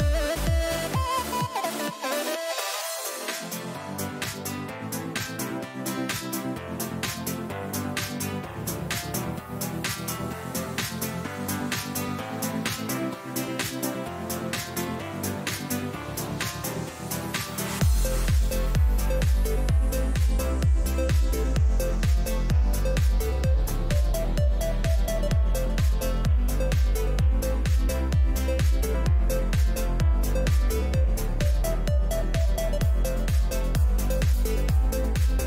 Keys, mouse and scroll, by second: 12.6-15.1 right drag, 15.1 KP_3, 19.0-20.8 drag, 28.5 middle click, 29.3-31.8 drag, 29.4-33.1 middle drag, 32.2 a, 34.4 z, 35.0 a, 35.3 a.